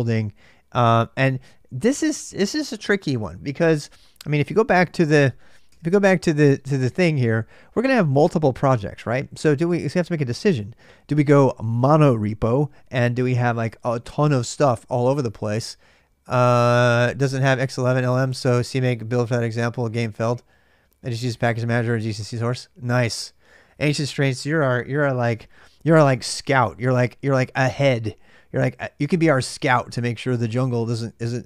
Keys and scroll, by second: 4.2 super+Tab.